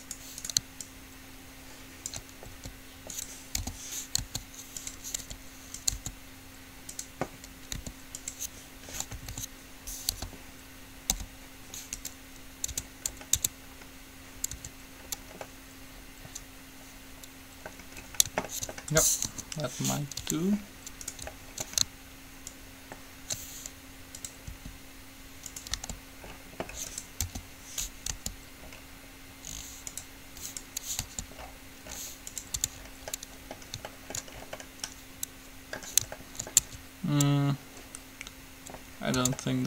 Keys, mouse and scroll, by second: 0.7 right click, 1.0 ctrl+click, 1.6 click, 1.6 right click, 2.2 click, 2.2 right click, 2.7 s, 3.7 o, 4.4 s, 5.4 r, 6.2 s, 8.0 r, 9.3 a, 9.5 a, 10.3 p, 11.2 u, 12.9 Tab, 13.7 Tab, 14.7 Tab, 19.4 KP_3, 20.4 Tab, 21.5-23.2 middle drag, 22.7 ctrl+click, 22.7 right click, 23.4-26.3 drag, 24.7 r, 26.0 g, 27.4 o, 28.4 g, 30.7-32.1 right drag, 31.2 g, 32.7 Tab, 36.8 Tab, 39.4 Tab.